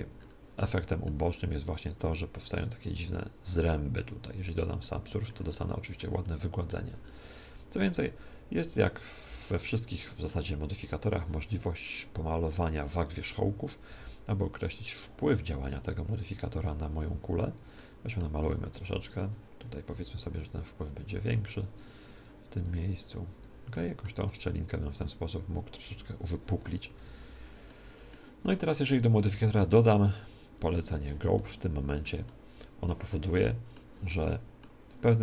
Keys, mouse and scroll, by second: 1.8 click, 1.8 right click, 3.8 middle click, 4.0 ctrl+2, 4.5 ctrl+2, 4.8-8.8 middle drag, 10.2-12.6 middle drag, 14.0 ctrl+Tab, 14.7 click, 17.7-19.4 middle drag, 18.4-25.3 drag, 19.8 f, 23.7-25.5 middle drag, 25.3 Escape, 25.4 click, 26.9 ctrl+Tab, 27.6-29.2 middle drag, 29.2 click, 29.2 middle click, 31.3-35.2 middle drag.